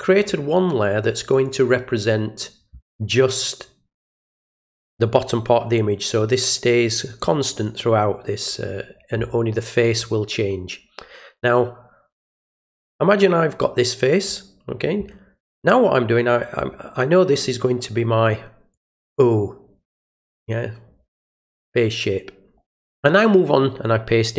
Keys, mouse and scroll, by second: 1.3 click, 12.8 click, 18.7 click.